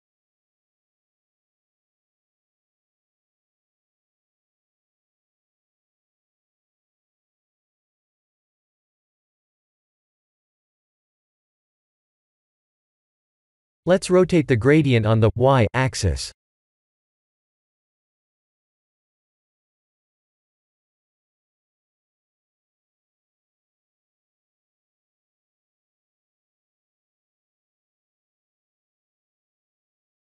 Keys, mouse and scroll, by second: 2.9 click, 6.4 click, 7.2 click, 7.9 click, 14.1 click, 15.1 click, 15.3 ctrl+t, 16.0 shift+middle click, 17.1-17.5 scroll up 4, 18.3 KP_1, 19.0 KP_3, 19.5 KP_7, 20.4-20.8 scroll up 4, 20.8 shift+middle click, 22.0-22.6 scroll up 2, 22.7 shift+middle click, 25.7 click, 29.9 click.